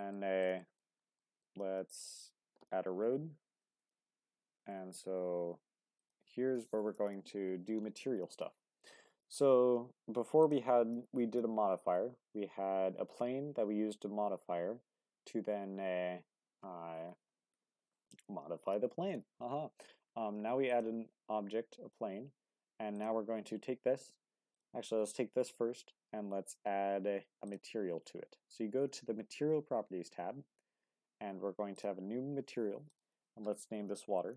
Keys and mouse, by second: 0.2 middle click, 0.6-0.9 shift+middle drag, 1.2 middle click, 1.9 click, 2.5 Tab, 6.0 click, 10.4 click, 22.9 click, 27.4 click, 31.7-34.3 drag.